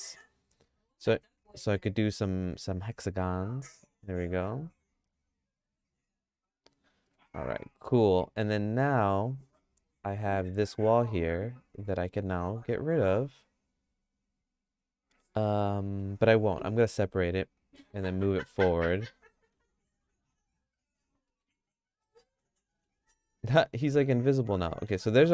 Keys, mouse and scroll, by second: 7.1 middle click, 8.0 middle click, 8.4 Tab, 8.5 middle click, 9.0 Tab, 10.5 3, 10.6 click, 11.9 middle click, 12.2-16.0 shift+middle drag, 16.0 shift+click, 16.9 y, 18.0 g, 21.3 middle click, 21.7-22.8 shift+middle drag, 23.4 middle click, 23.7 Tab, 24.7 middle click, 25.2 shift+middle click.